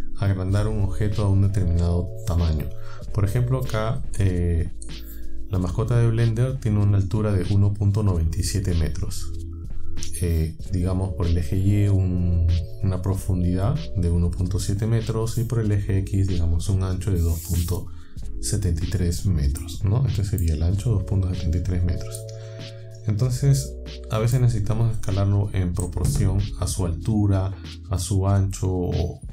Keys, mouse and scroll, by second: 19.6 scroll up 1, 19.6-20.6 middle drag, 22.2-24.5 middle drag.